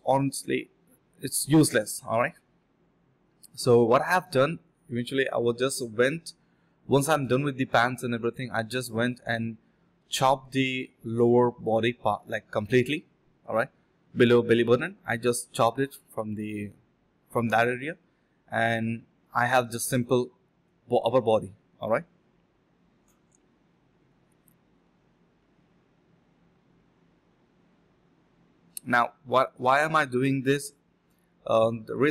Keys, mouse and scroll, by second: 2.8 shift+click, 3.8 alt+click, 4.0 alt+click, 4.4 ctrl+b, 4.8-5.7 typing, 7.7-9.0 typing, 8.3 alt+click, 8.6 alt+click, 9.6 alt+click, 9.9 ctrl+b, 10.6-11.7 typing, 13.3 typing, 13.3 shift+click, 14.2 alt+click, 16.2 shift+click, 17.3 alt+click, 18.7 double click, 22.5-23.4 typing, 23.5 shift+click, 24.8 typing, 25.0 shift+click, 25.6 shift+click, 26.9 ctrl+b, 27.1-28.4 typing, 28.5 alt+click, 28.9 alt+click, 30.3 alt+click, 31.0 alt+click, 31.9 alt+click.